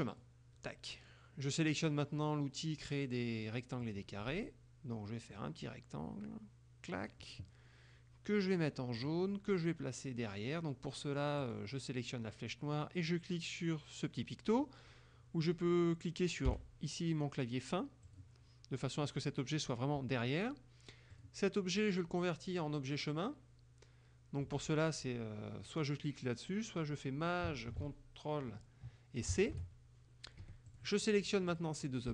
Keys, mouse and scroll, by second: 0.1 click, 3.9 click, 5.4-7.3 drag, 9.0 click, 11.4 click, 16.6 End, 18.1 click, 21.2 click, 29.4 ctrl+shift+c, 30.4 F1, 30.8 click, 31.6 click.